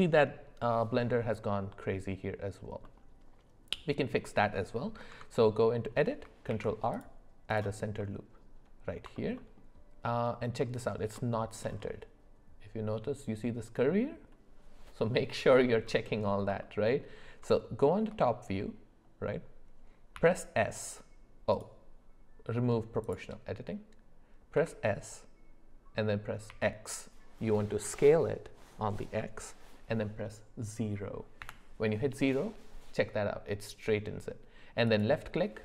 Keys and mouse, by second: 2.8-3.9 middle drag, 5.1 Tab, 6.5 ctrl+r, 8.0 middle click, 9.1 alt+middle click, 9.4 alt+middle click, 11.3 shift+middle click, 17.5 shift+middle click, 20.1 s, 23.0 click, 24.5 s.